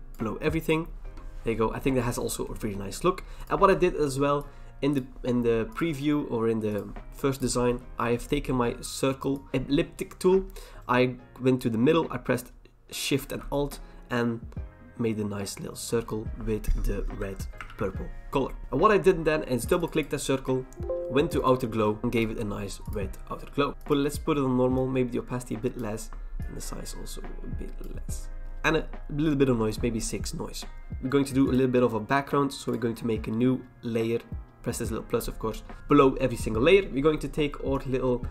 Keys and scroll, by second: 1.1 ctrl+t, 1.1 Return, 17.2 alt+BackSpace, 17.6 ctrl+d, 18.6 v.